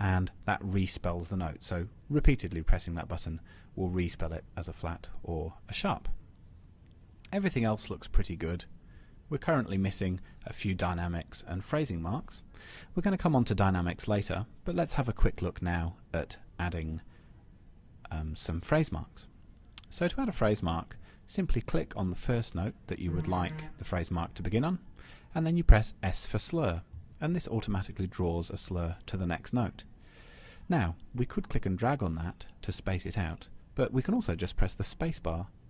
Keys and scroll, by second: 2.4 Return.